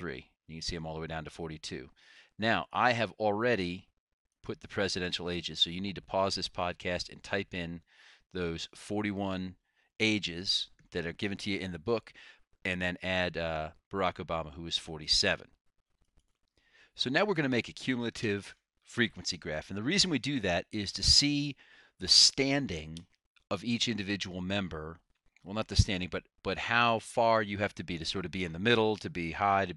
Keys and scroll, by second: 0.0 Return, 0.0 Up, 0.0 1, 3.0 Down, 4.6 ).